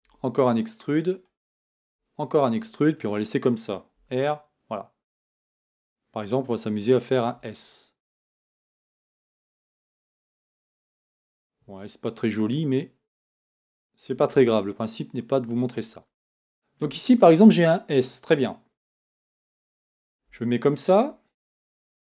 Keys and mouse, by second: 0.0 e, 1.8 e, 3.9 r, 10.0 r, 14.3 g, 20.2 Tab, 21.7 shift+a.